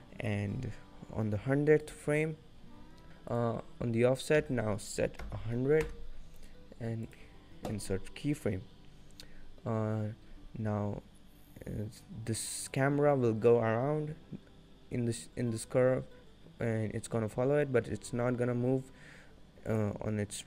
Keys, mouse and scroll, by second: 0.0 scroll down 1, 1.9 click, 3.4 click, 5.3 0, 6.5 right click.